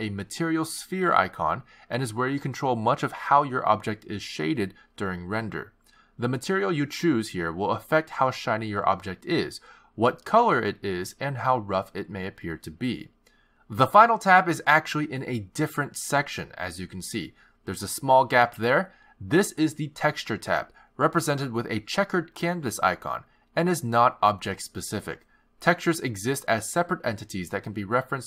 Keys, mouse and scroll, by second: 3.1-4.4 scroll down 12, 4.0-5.7 scroll up 14, 5.7 click, 6.7-7.4 scroll down 3, 7.8 click, 10.6-11.6 scroll down 12, 11.5-13.9 scroll up 18, 16.9 click.